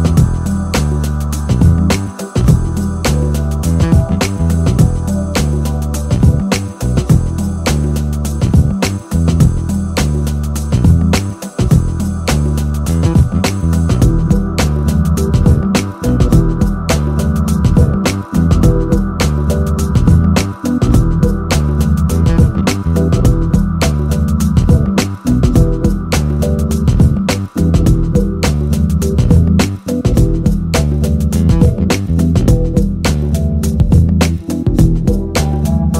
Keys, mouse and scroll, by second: 6.9-10.0 drag, 10.8 right click, 11.5-13.0 middle drag, 14.5 right click, 15.2-16.4 middle drag, 22.4 click, 23.4 KP_0, 28.5 click, 30.1 click, 34.0-35.2 drag.